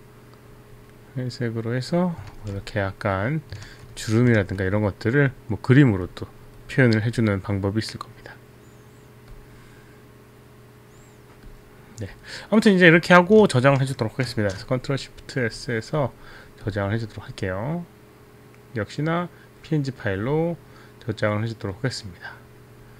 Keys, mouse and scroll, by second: 0.6 click, 2.3 ctrl+z, 3.6 ctrl+z, 4.4 ctrl+z, 14.4 ctrl+shift+s, 15.8 click, 16.0 click, 18.2 click.